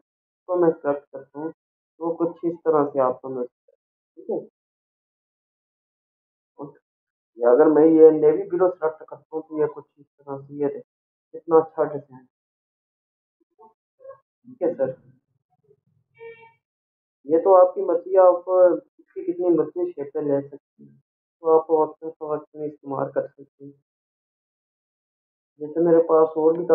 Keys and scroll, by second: 3.0 ctrl+=, 7.2 ctrl+a, 16.1 ctrl+0, 22.8 ctrl+a, 24.2 Delete.